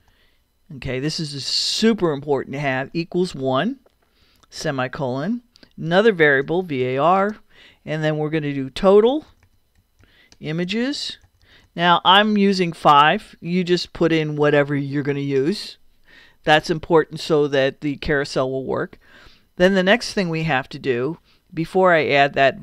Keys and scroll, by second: 0.0-0.5 typing, 2.8 =, 4.2 l, 4.6 ;, 5.0 Return, 6.4 v, 9.1-11.5 typing, 13.2 =, 14.0 5, 14.4 ;, 15.1 Return.